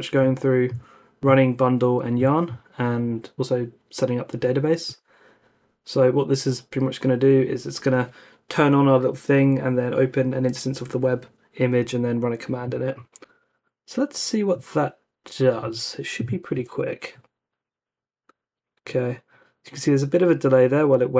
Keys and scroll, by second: 15.7 super+c, 16.5 super+v, 16.8 Return.